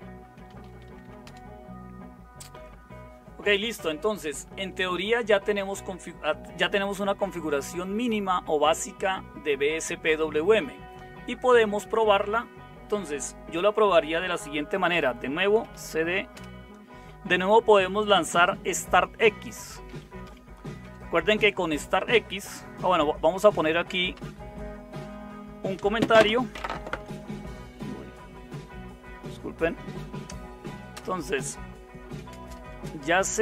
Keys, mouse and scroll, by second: 0.0-1.5 typing, 15.3-16.3 typing, 16.3 Return, 19.3-20.8 typing, 22.8-24.2 typing, 26.7 #, 31.0-33.4 typing.